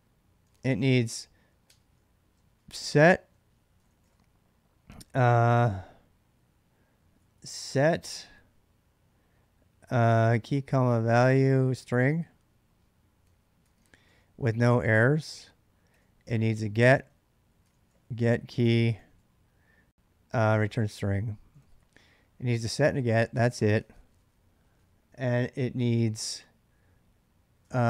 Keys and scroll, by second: 0.0-5.3 typing, 1.5 Tab, 6.5-7.2 typing, 9.9-23.5 typing, 13.1 ctrl+[, 21.3 ctrl+[, 21.4 ctrl+j, 25.7 typing, 27.4-27.8 typing.